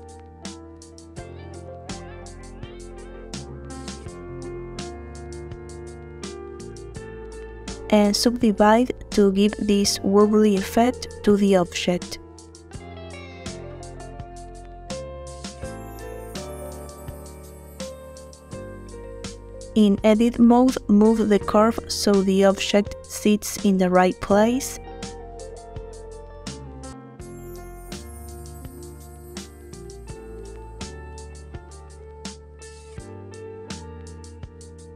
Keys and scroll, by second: 5.8 Tab, 6.8 a, 11.0 Tab, 19.6 Tab, 21.2 a.